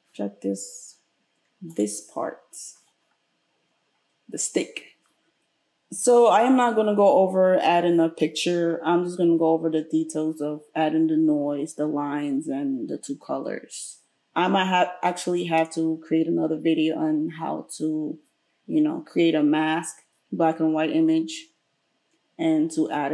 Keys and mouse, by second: 1.9 right click, 2.0-23.1 middle drag.